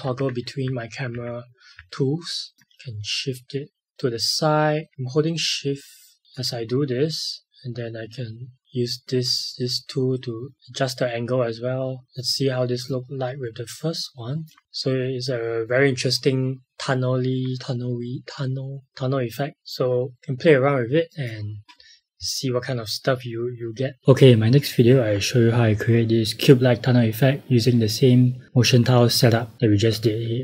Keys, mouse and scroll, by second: 2.5 click, 7.4 click, 12.0 click, 19.6 click.